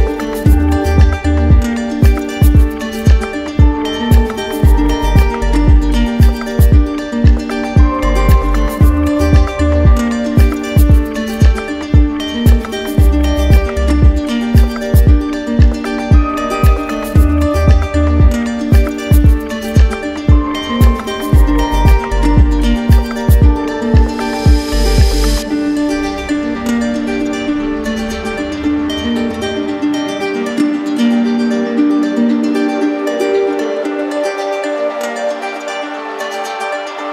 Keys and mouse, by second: 0.6 click, 1.9 click, 4.1 ctrl+click, 6.3 ctrl+z, 8.5 click, 10.2 click, 11.7 click, 12.6 ctrl+click, 14.3 click, 15.2 click, 17.9 click, 21.8 click, 32.4-33.5 drag, 34.3 click, 35.6 click, 35.8 ctrl+z.